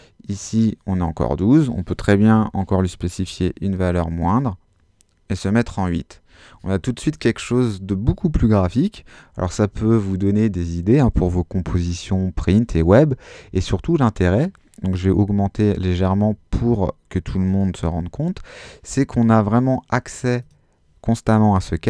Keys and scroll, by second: 2.2 Delete, 3.2 8, 3.8 Home, 15.2 |, 15.6 4, 16.2 Home.